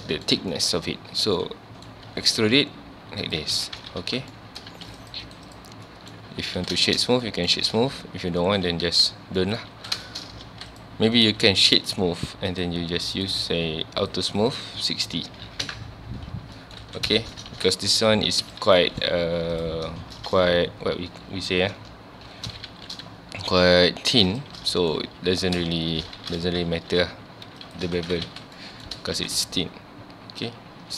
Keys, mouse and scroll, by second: 0.8 scroll up 1, 1.2 scroll down 1, 1.4-2.1 middle drag, 2.1 e, 3.4 shift+click, 3.5 alt+a, 3.8 Tab, 4.0 alt+a, 4.2 scroll down 1, 4.3-4.7 middle drag, 4.7 ctrl+s, 5.0 click, 5.2-5.9 right drag, 5.9-6.3 middle drag, 6.3 scroll up 1, 6.6 alt+a, 6.9-8.1 shift+middle drag, 8.1 ctrl+z, 9.1 scroll down 1, 9.4 middle drag, 9.7 alt+a, 10.1 shift+middle drag, 10.3 scroll up 1, 10.5 ctrl+s, 10.7 click, 11.2-12.5 right drag, 12.5 click, 13.2 click, 14.0 click, 14.4-15.7 drag, 15.7 KP_Enter, 16.4 scroll down 1, 16.6 middle drag, 16.8 alt+a, 17.2-17.5 shift+middle drag, 17.5 ctrl+s, 17.6 ctrl+scroll down 2, 17.8-18.1 middle drag, 18.1-18.5 scroll up 1, 18.5 click, 18.6 Tab, 18.8 middle click, 19.2 3, 19.5 click, 19.9 scroll down 1, 20.2-22.7 middle drag, 22.7 shift+g, 24.7 middle click, 25.0-25.4 scroll up 1, 25.4 g, 27.7 shift+click, 27.9 alt+a, 28.1 Tab, 28.3 alt+a, 28.4 scroll down 1, 28.6-29.2 middle drag, 29.2 ctrl+s, 29.3 scroll down 1, 29.4-30.9 middle drag.